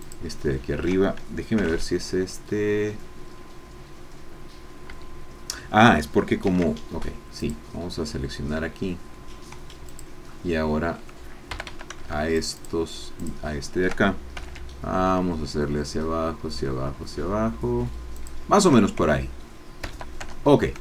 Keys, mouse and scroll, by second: 0.0 alt+shift+click, 1.5 g, 4.9 Escape, 6.4 ctrl+r, 7.4 click, 9.8 click, 11.5 a, 12.3 alt+shift+click, 13.4 alt+shift+click, 14.3 alt+shift+g, 18.1 shift+click, 19.9 a, 20.4 Tab, 20.5-20.8 scroll down 1.